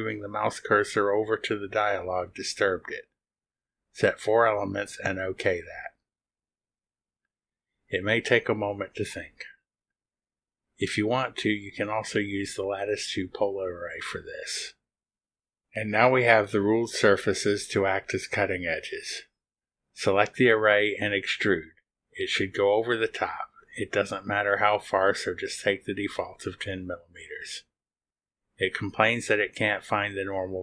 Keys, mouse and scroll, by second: 3.9 click, 4.6 3, 5.2 BackSpace, 5.3 4, 6.7 click, 24.4 click, 29.3 click.